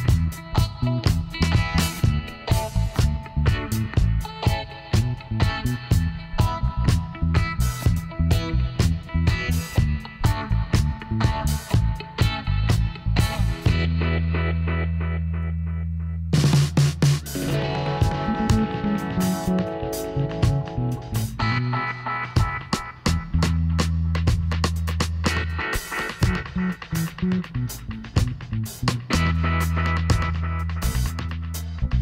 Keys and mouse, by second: 4.7 Tab, 6.2 z, 12.0-13.9 drag, 13.3 Tab, 14.5 Tab, 15.0 a, 16.6 KP_1, 17.6 z, 18.5 z, 18.9 KP_Divide, 20.0 a, 21.8-23.2 middle drag, 23.4 KP_1, 26.0 Tab, 27.8 middle click, 28.7 ctrl+r, 31.8-32.0 middle drag.